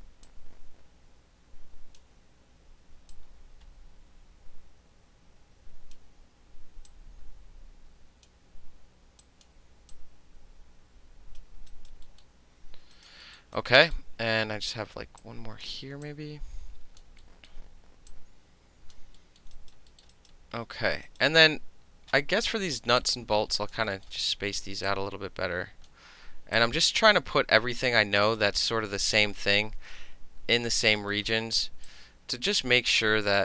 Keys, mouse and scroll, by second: 0.3-2.0 drag, 2.0-3.1 middle drag, 3.1-6.0 drag, 6.0-6.9 middle drag, 6.9-8.3 drag, 9.2 click, 9.9-11.4 drag, 11.7 alt+right click, 12.1 alt+middle click, 13.0 alt+right click, 13.6 alt+right click, 15.2 click, 15.6 middle click, 16.1 click, 17.0 alt+middle click, 17.5 alt+middle click, 18.1 click, 18.9 alt+middle click, 19.4 alt+middle click, 19.6 alt+right click, 19.7 alt+middle click, 20.0 alt+middle click, 20.1 alt+right click, 20.3 alt+middle click, 20.9 alt+middle click, 21.1 alt+right click, 21.2-23.0 alt+middle drag, 23.0-23.7 alt+drag, 23.7 alt+middle click, 24.1 alt+middle click, 24.2 alt+right click, 24.3 alt+middle click, 24.9-25.9 alt+right drag, 25.9-26.6 middle drag, 26.6-27.8 right drag, 27.8 alt+middle click, 28.2 alt+middle click, 28.3 alt+right click, 28.6 alt+middle click, 29.3 alt+middle click, 30.7 alt+middle click, 30.9 alt+right click, 31.0 alt+middle click, 31.2-31.9 alt+middle drag, 31.9-33.4 alt+drag.